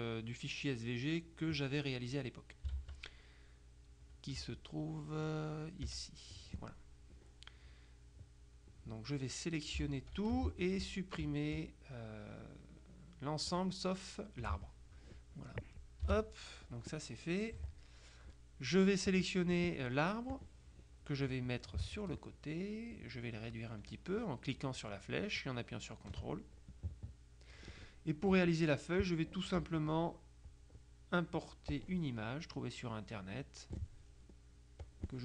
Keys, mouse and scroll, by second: 2.9 alt+Tab, 4.5 Tab, 8.1-9.1 drag, 10.0 ctrl+a, 13.6 shift+click, 16.2 Delete, 16.3 Insert, 17.6 KP_Subtract, 19.2 click, 20.4 click, 22.2-25.2 ctrl+drag, 25.5-26.6 drag, 26.8 click, 30.6 click, 31.8 click, 33.5 click, 34.9 click.